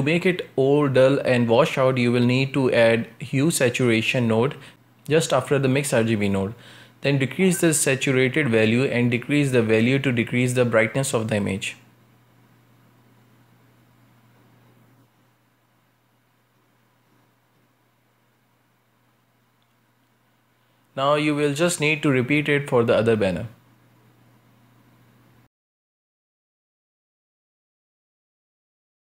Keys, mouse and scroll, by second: 0.3-0.7 scroll up 1, 0.7 shift+a, 4.8-5.3 scroll up 2, 5.3 shift+middle click, 6.5-7.8 shift+drag, 7.8 scroll up 1, 8.1-10.4 shift+middle drag, 10.4-11.0 scroll up 1, 11.0-13.6 shift+drag, 13.6 scroll down 1, 13.9-15.3 shift+middle drag, 15.3 scroll down 2, 15.6-17.5 shift+middle drag, 17.5-18.0 scroll up 1, 18.4-21.4 shift+drag, 21.5 scroll down 2, 21.7-22.5 shift+middle drag, 22.5-23.4 scroll up 1, 23.4 right click, 24.9-27.5 drag, 27.5 right click, 27.6 shift+middle click, 28.2 scroll up 1, 28.4 a, 28.8 u.